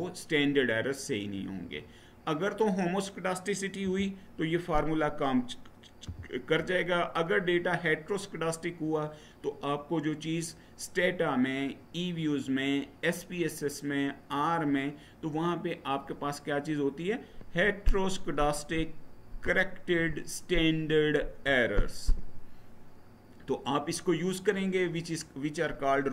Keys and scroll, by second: 3.6 Left, 5.8 Right.